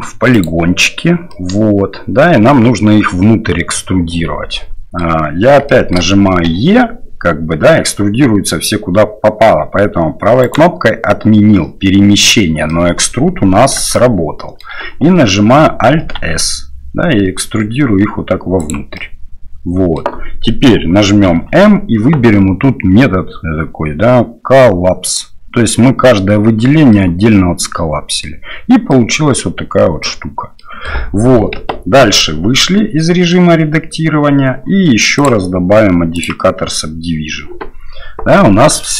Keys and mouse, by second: 1.4-5.0 middle drag, 5.8 shift+middle click, 12.8 middle click, 14.1 shift+middle click, 16.0 alt+s, 19.0-20.0 middle drag, 21.3 m, 26.9-28.2 middle drag, 28.9-30.0 middle drag, 30.6 middle click, 32.0 Tab, 32.6-33.3 middle drag, 35.1-38.0 drag, 38.3-38.8 middle drag.